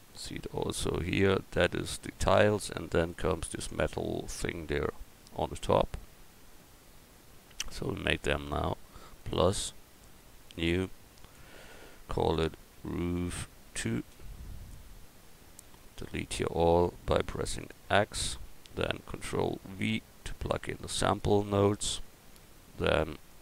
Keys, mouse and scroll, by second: 9.2-13.4 drag, 12.9 o, 17.6-19.3 drag, 18.0 x, 19.7 ctrl+v, 23.3 click.